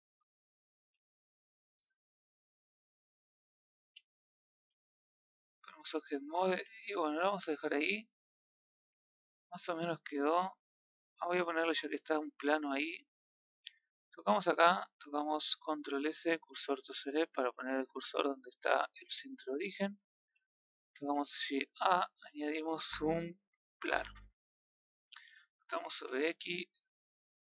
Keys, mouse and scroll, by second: 0.9 z, 1.1 middle click, 1.5 z, 2.3-3.6 middle drag, 3.8 a, 4.0-4.8 scroll down 1, 4.8-5.4 scroll down 1, 5.4-5.8 scroll down 1, 5.8 Tab, 6.1-6.5 middle drag, 6.5 a, 6.9-8.4 middle drag, 8.4 scroll up 3, 8.9-9.4 shift+middle drag, 9.4-9.9 scroll up 3, 9.9-12.2 middle drag, 12.2 scroll down 1, 12.9-13.7 scroll up 1, 13.7 click, 14.7-15.4 scroll up 1, 16.5 shift+s, 18.7-24.3 middle drag.